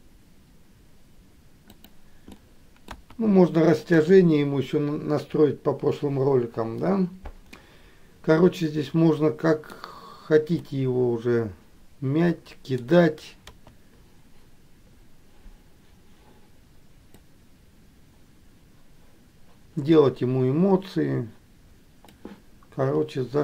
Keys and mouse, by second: 2.6 middle click, 7.9-10.0 middle drag, 10.8-12.9 middle drag, 17.4-22.3 drag.